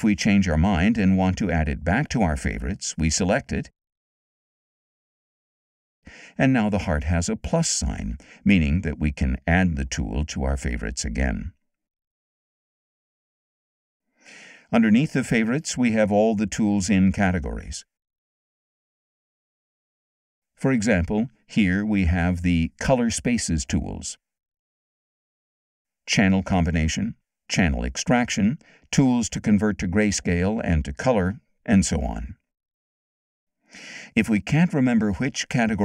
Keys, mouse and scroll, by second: 0.0-1.2 drag, 3.0 click, 4.4 click, 8.0 click, 9.1-10.5 drag, 11.1 click, 14.1-15.5 drag, 17.1 click, 17.9 click, 18.8 click, 20.0 click, 24.2 click, 26.1 click, 27.4 click, 29.6 click, 30.9 click, 32.0 click.